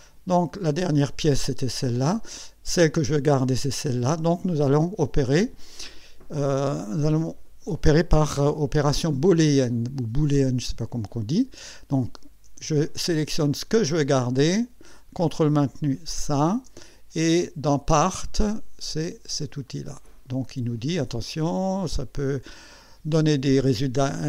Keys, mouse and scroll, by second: 0.5 click, 2.4 click, 13.4 click, 16.1 ctrl+click, 19.7 click.